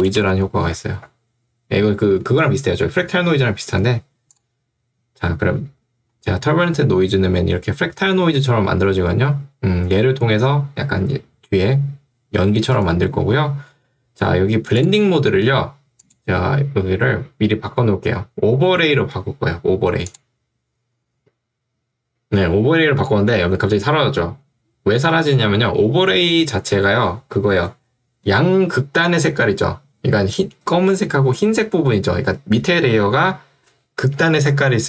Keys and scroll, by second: 0.0 BackSpace, 0.4 u.